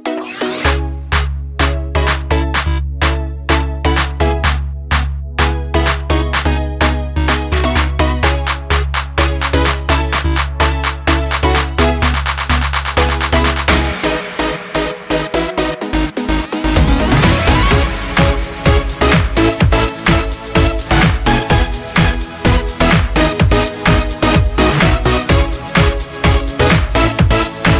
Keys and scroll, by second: 4.5 ctrl+j.